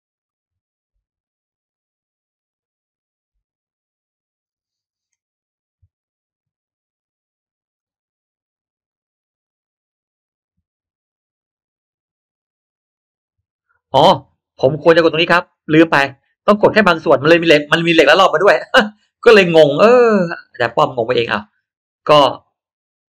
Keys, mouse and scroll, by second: 0.2 click, 7.7 click, 15.4 click, 20.1 middle click, 20.1-20.5 scroll down 1, 20.5-20.9 scroll up 1, 20.6 middle click, 22.8 click, 23.0 click.